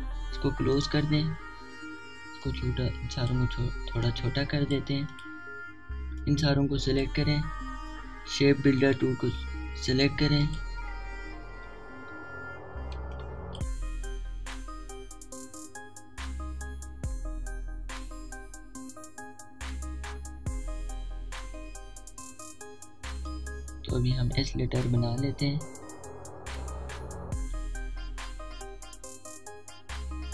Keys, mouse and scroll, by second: 2.8 typing, 3.4-9.9 alt+shift+drag, 9.9 right click, 11.5 click, 12.8 alt+scroll up 1, 13.5-13.8 alt+scroll up 1, 14.1-14.7 typing, 14.2 click, 15.1 alt+scroll down 1, 24.3-30.3 drag.